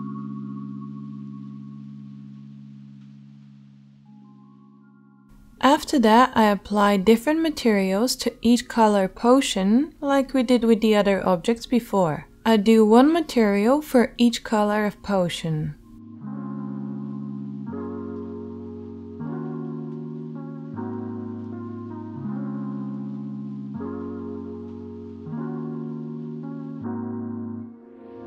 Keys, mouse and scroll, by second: 4.5 middle click, 5.4 right click, 5.8-7.0 shift+middle drag, 7.0-8.9 right drag, 8.9 middle click, 9.0-15.1 drag, 12.8 Tab, 15.4-21.1 shift+drag, 15.4 l, 18.5 l, 20.1 right click, 21.1-26.2 middle drag, 26.2 right click, 26.6 middle click, 26.6 e.